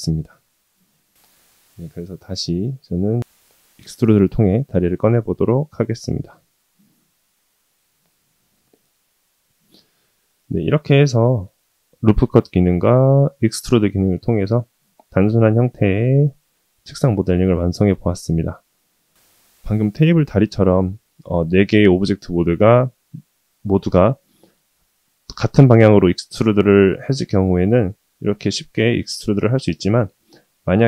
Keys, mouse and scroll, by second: 5.4 KP_1, 9.3 g, 10.9-13.0 middle drag, 19.6-22.7 middle drag, 29.1-30.3 middle drag.